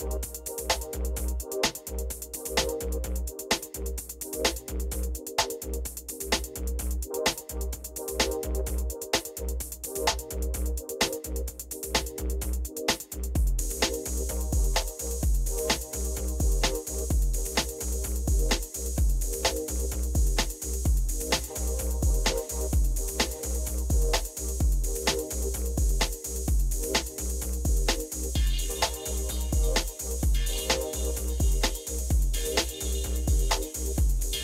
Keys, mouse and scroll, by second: 11.7 Home, 11.9 Up, 19.9 Up, 22.4 Up, 23.1-25.5 Up.